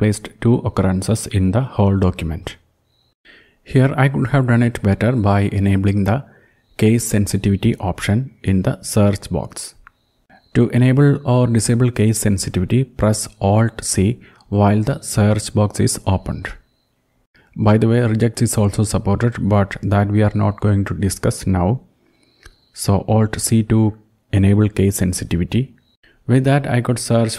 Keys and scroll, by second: 7.0 ctrl+\, 20.2 alt+c.